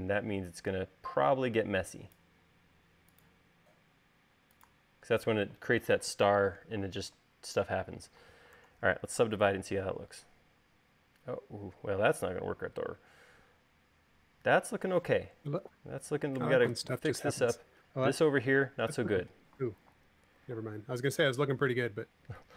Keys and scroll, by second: 1.8 e, 3.0 l, 5.9 space, 9.3 super+s, 9.8 u, 21.8 u.